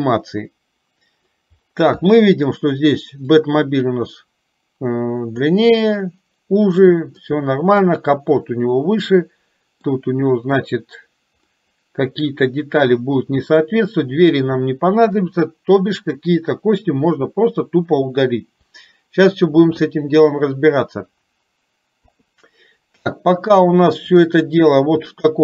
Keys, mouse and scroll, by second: 3.4-5.6 drag, 7.4 middle click, 9.3 middle click, 11.6-13.7 middle drag, 22.1 KP_3, 24.2 click, 25.2 shift+middle click.